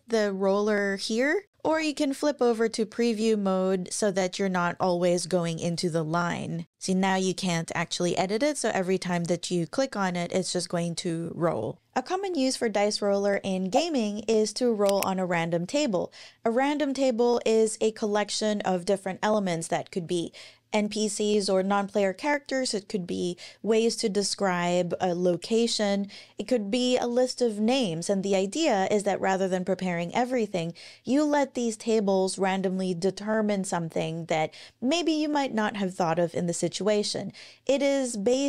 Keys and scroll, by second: 1.7 super+e, 11.7 super+e.